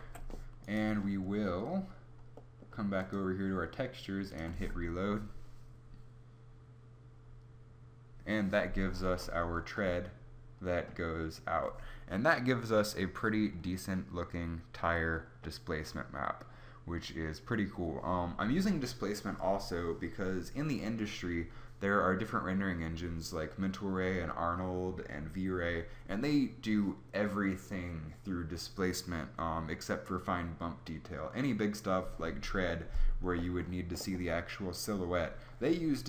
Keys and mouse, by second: 0.0 Escape, 0.7 click.